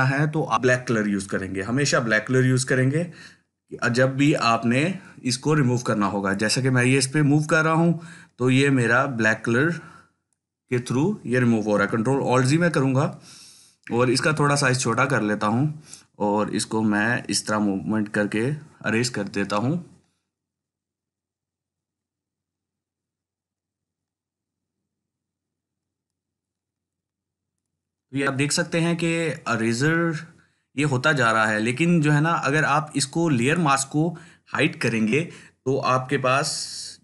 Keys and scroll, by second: 12.0 ctrl+alt+z, 13.9-14.8 typing.